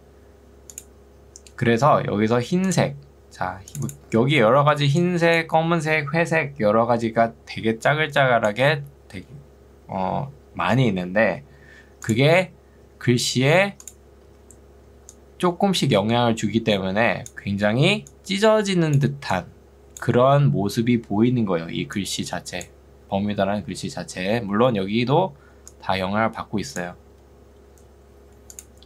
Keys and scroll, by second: 4.7 ctrl+2, 9.9 Escape, 14.3 ctrl+2, 27.5 Escape.